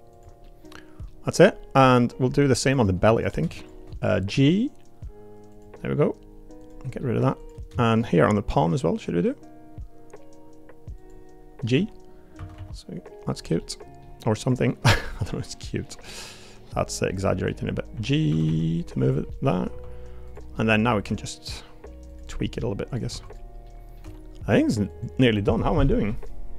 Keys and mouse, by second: 0.4 middle click, 4.3 g, 7.0 middle click, 7.4 click, 11.7 g, 12.3 a, 12.5 g, 13.6 middle click, 15.2 middle click, 17.1 middle click, 17.9 g, 18.3 a, 18.5 g, 19.3 middle click, 19.7 3, 20.5 middle click, 21.0 g, 22.3 middle click, 22.9 click, 23.1 2, 23.2 click, 23.6 middle click, 24.0 g.